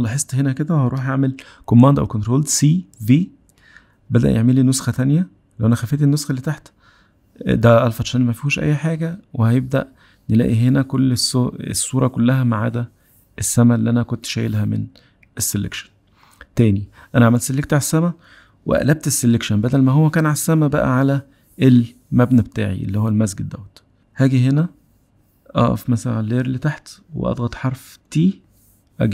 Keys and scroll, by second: 2.0 super+c, 3.7 super+v, 27.8 t.